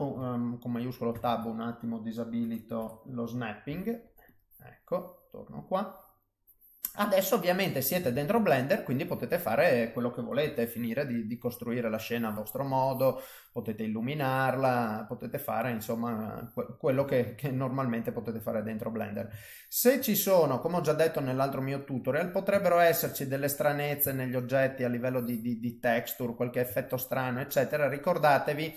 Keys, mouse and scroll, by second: 1.1 shift+Tab, 2.8 KP_7, 3.7 g, 4.6 middle click, 6.5 middle click, 7.4 middle click, 8.1 shift+a, 10.4 s, 11.5 middle click, 12.7 click, 13.1 middle click, 14.4 middle click, 15.6 middle click, 16.2 middle click, 17.1 ctrl+middle click, 17.6 middle click, 18.8 middle click, 19.9 ctrl+middle click, 21.2 click, 21.7 middle click, 22.6 ctrl+middle click, 23.1 middle click, 24.2 shift+middle click, 24.7 middle click, 25.7 click, 26.2 middle click, 26.8 ctrl+middle click, 28.0 click.